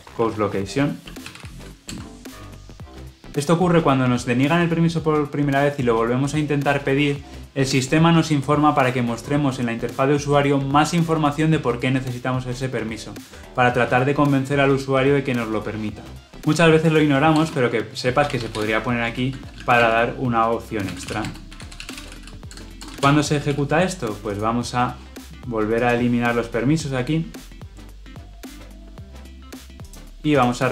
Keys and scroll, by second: 1.9 Return, 30.3 shift+F10.